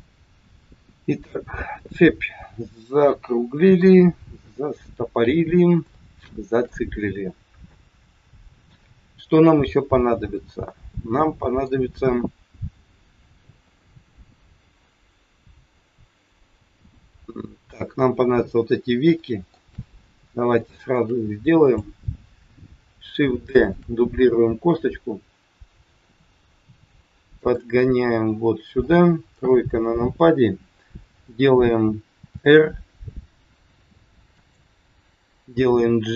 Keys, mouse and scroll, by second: 0.1 middle click, 3.7 KP_1, 5.4 scroll down 2, 5.8 shift+middle click, 7.7 middle click, 13.3 KP_1, 15.8-16.2 scroll up 1, 19.1 shift+middle click, 20.1-20.6 scroll up 2, 20.6 shift+middle click, 21.5 click, 23.6 shift+d, 27.8 middle click, 29.3 KP_3, 32.3 r, 35.6 g.